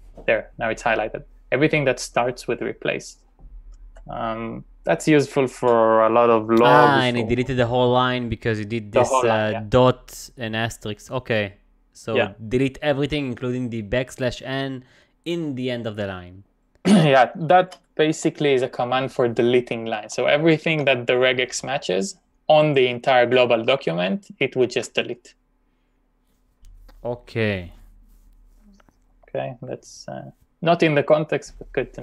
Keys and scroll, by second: 17.7 shift+;, 18.1 Up, 20.0 Left, 20.4 Left, 22.6 Left, 22.9 Left, 24.3 Right.